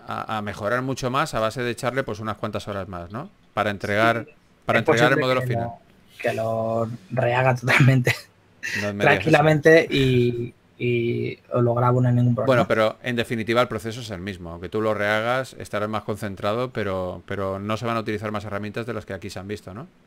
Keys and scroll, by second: 3.4 shift+f.